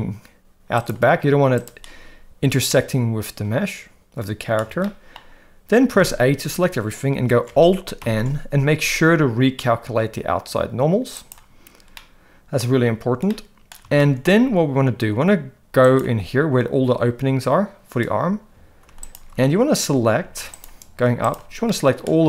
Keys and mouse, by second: 1.6 click, 2.7-4.6 middle drag, 4.9 shift+middle click, 5.9 a, 8.0 alt+n, 11.9 middle click, 13.3 middle click, 13.9 shift+middle click, 15.9 click, 20.2 ctrl+z, 21.2 ctrl+shift+click, 21.7 middle click.